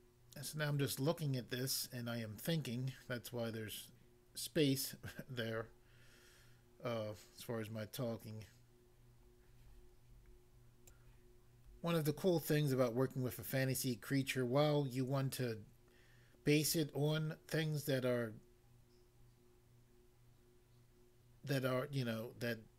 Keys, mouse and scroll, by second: 10.8 click.